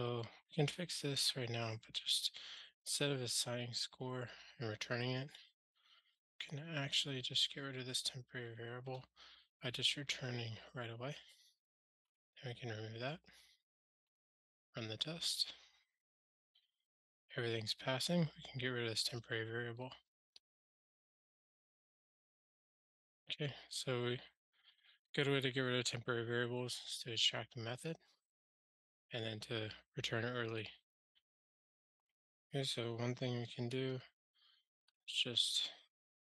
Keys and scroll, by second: 7.2 ctrl+g, 12.1 super+BackSpace, 13.8 super+BackSpace, 13.9 ctrl+alt+shift+r, 19.2 super+BackSpace, 21.9 super+BackSpace, 22.1 ctrl+alt+shift+r, 33.9 shift+super+Return.